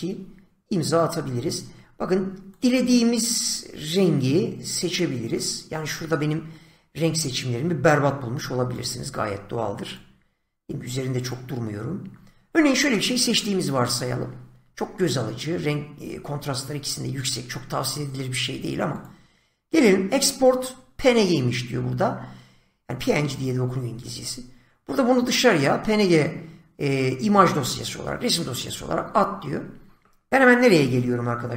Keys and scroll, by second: 30.7 <.